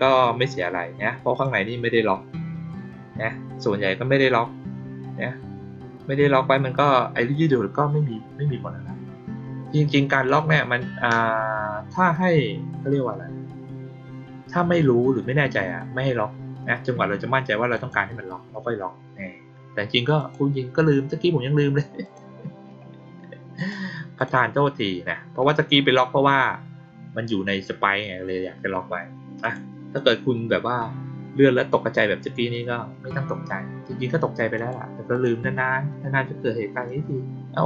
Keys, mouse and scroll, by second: 1.2 click, 10.0 click, 17.7 click, 20.1 click, 22.0 click, 23.5 click, 24.1 click, 29.3 click, 29.9 click, 34.5 click, 35.0 click.